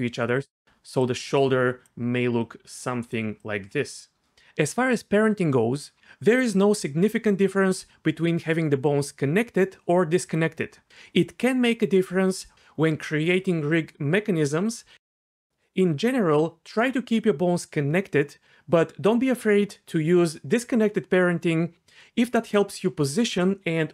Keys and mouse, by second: 0.6 click, 2.4 click, 3.4-16.8 drag.